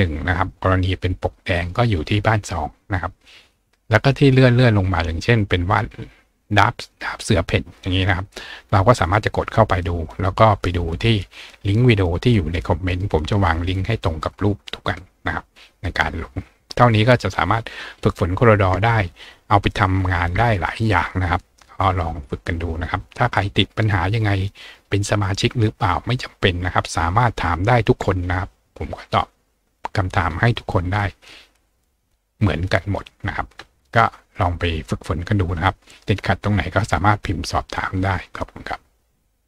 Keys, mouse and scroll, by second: 0.4 scroll down 2, 2.9 scroll down 2, 3.5-4.5 scroll down 2, 9.0 click, 15.8 click, 22.3-23.1 scroll down 4.